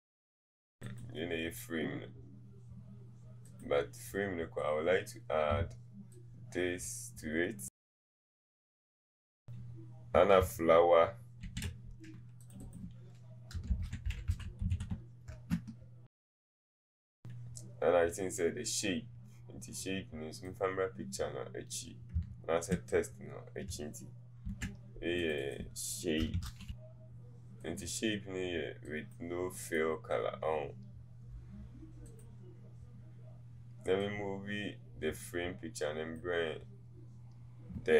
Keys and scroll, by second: 15.3 typing, 26.4 shift+s.